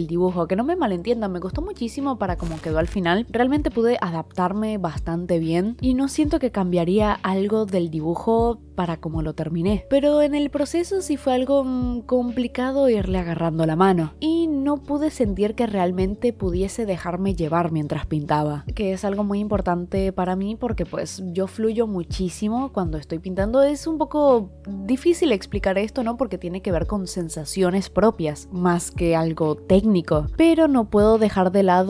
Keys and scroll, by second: 9.8 ctrl+z, 11.6 ctrl+z, 14.5 ctrl+z, 15.4 ctrl+z, 20.9 ctrl+z.